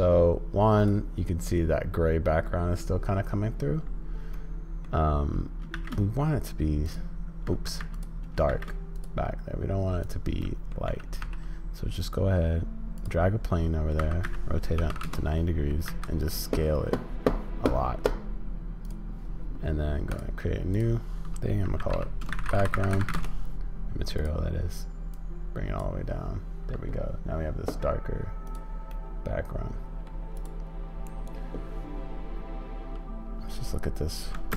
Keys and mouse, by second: 4.5 middle click, 7.9 x, 10.4 drag, 10.9 g, 13.4 click, 20.2 click, 20.7-24.3 drag, 28.5 click, 28.9-30.0 middle drag, 30.4 click.